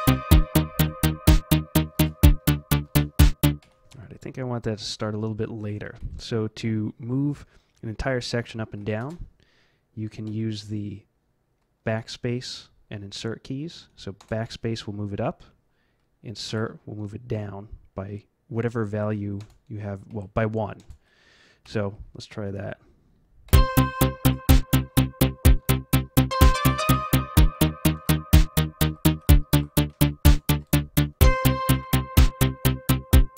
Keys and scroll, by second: 1.9 space, 2.8 space, 3.6 F12, 4.1 Up, 4.6 Up, 4.6 Up, 9.0 space, 10.1 space, 14.2 BackSpace, 16.4 Insert, 19.4 BackSpace, 20.1 Insert, 20.8 BackSpace, 21.6 Home, 23.4 F11, 27.9 space, 28.0 Up, 28.5 Up, 28.6 Up, 30.2 BackSpace.